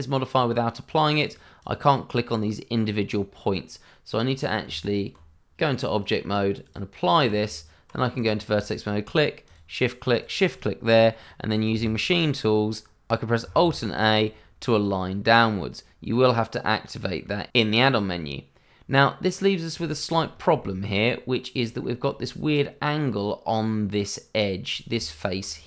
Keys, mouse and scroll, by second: 1.5 double click, 2.3 click, 4.6 Tab, 6.0 click, 7.4 Tab, 8.1 click, 9.0 click, 10.1 shift+click, 10.8 middle click, 13.5 alt+a, 14.9 middle click, 17.6 shift+middle click, 17.7 middle click, 17.8 shift+middle click, 19.0 middle click, 20.0 shift+middle click, 20.3 scroll up 1, 20.6 shift+middle click, 21.0 middle click, 22.0 shift+middle click, 22.2-22.6 scroll up 1, 22.6 middle click, 24.9 Tab.